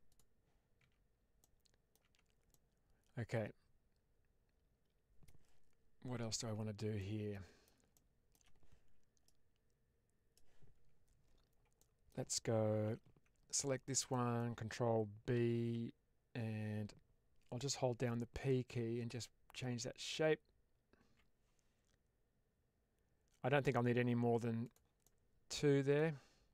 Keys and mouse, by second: 0.0 click, 0.7 Tab, 1.3-1.8 middle drag, 1.9 Tab, 2.4-5.2 middle drag, 7.0 middle click, 7.9 shift+middle click, 11.8 middle click, 12.8 2, 13.5 alt+click, 14.0 middle click, 15.2 ctrl+b, 18.1-21.0 p, 24.5 click, 25.0 middle click, 26.0 Tab.